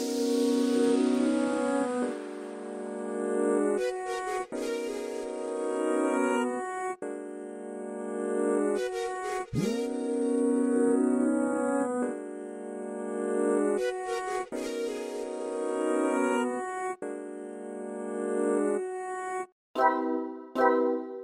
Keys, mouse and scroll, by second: 0.4 f, 0.9 click, 1.3 ctrl+z, 1.9 scroll up 3, 2.1-3.9 drag, 4.2 middle click, 4.6 ctrl+z, 5.2 click, 5.9-7.0 middle drag, 7.0 click, 7.3 ctrl+shift+right click, 8.1 f, 8.4 click, 10.2 middle click, 10.7 click, 11.7 middle click, 12.1 click, 12.8 middle click, 13.3 alt+shift+right click, 13.7 middle click, 13.9 shift+right click, 14.1 click, 15.3 middle click, 15.8 click, 16.3 middle click, 16.5 click, 17.3 middle click, 17.5 click, 18.1 middle click, 18.5 shift+f, 18.9 click, 19.5 middle click, 19.8 click, 20.6 middle click, 21.1 click.